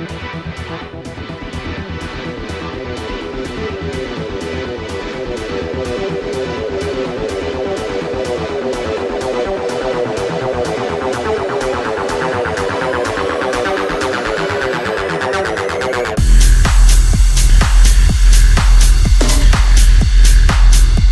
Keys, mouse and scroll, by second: 13.4-21.1 drag.